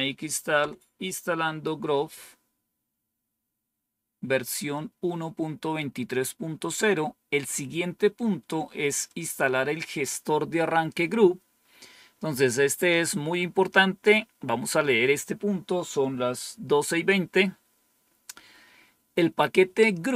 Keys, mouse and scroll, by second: 0.0-0.5 typing, 9.0 click.